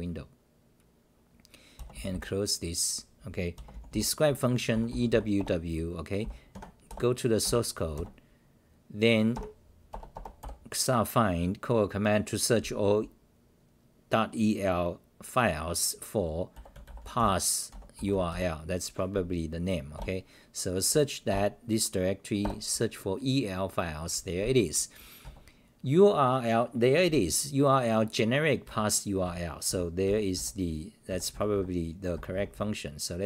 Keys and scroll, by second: 5.4 Return, 6.2 w, 6.5 Tab, 6.9 Return, 7.4 -, 19.9 Return, 21.3 Return, 23.1 Return, 25.2 Right, 27.4-28.5 scroll down 2, 28.6 Right, 30.0 Right, 31.3 Right, 31.5 Right, 32.1 Right, 32.3 Right, 32.5 Right, 33.2 Left.